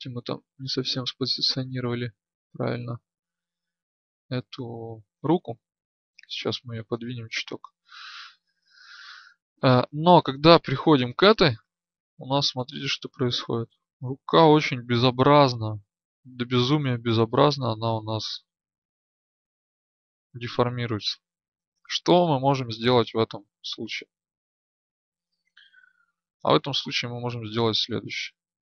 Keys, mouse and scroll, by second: 7.5 ctrl+z, 9.9 right click, 11.3-16.1 drag, 20.9 ctrl+z, 26.4 right click.